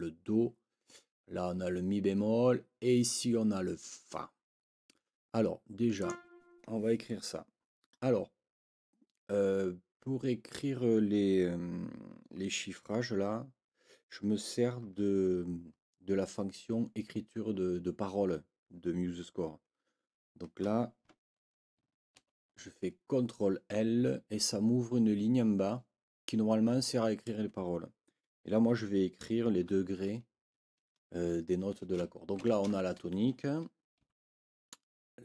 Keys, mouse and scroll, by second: 6.0 click, 22.2 ctrl+l, 32.4 shift+t, 34.0 Right.